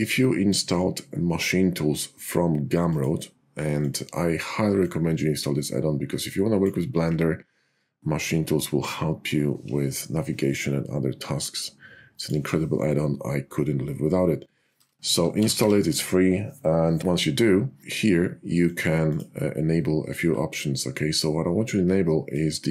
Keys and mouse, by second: 2.9-4.0 drag.